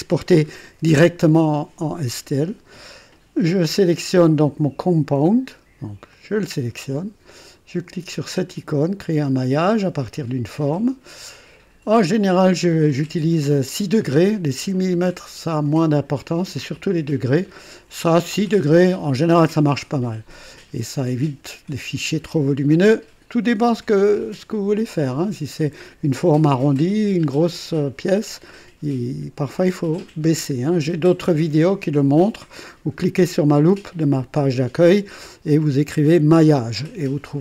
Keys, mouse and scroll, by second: 5.1 click, 6.1 click, 9.9 click.